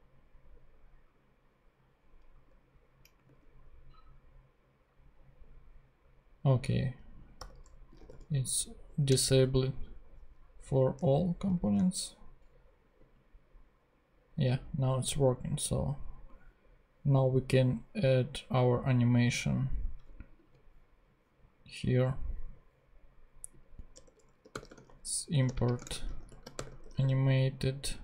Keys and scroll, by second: 3.2 ctrl+Tab, 7.4 =, 7.9 d, 8.2 s, 9.2 Return, 11.0 ctrl+Tab, 11.5 ctrl+super+Tab, 12.1 super+Tab, 23.9 Return, 24.2-28.0 typing.